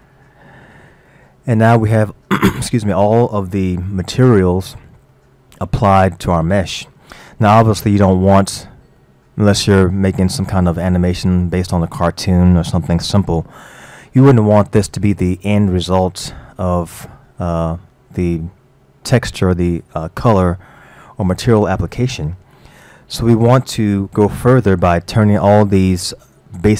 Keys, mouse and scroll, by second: 1.1-6.3 middle drag, 6.3-6.7 scroll up 1, 6.7-12.1 middle drag, 15.1-19.2 middle drag, 26.3-26.7 middle drag.